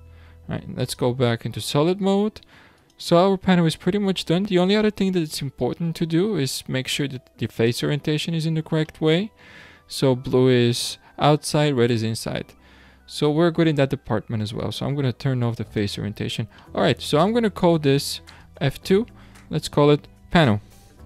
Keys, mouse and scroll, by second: 0.8 click, 2.8 click, 8.3 scroll down 6, 8.9-11.9 middle drag, 11.9 scroll down 1, 11.9-13.5 middle drag, 13.5-14.2 scroll down 1, 14.2-14.6 scroll down 1, 14.6-16.1 drag, 16.1 scroll down 2, 16.6-18.4 middle drag, 18.4 F2.